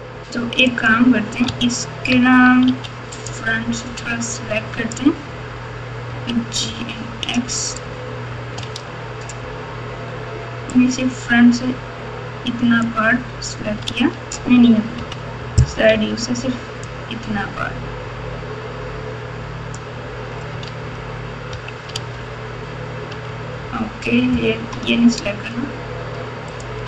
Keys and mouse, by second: 0.7 click, 1.5 Tab, 2.6 1, 3.3-4.9 drag, 6.0 g, 10.7-12.8 drag, 13.8 alt+z, 14.9 KP_3, 15.8 alt+z, 17.0-19.7 drag, 20.6 alt+z, 21.5 KP_1, 21.9 alt+z, 23.2 alt+z, 26.5 click.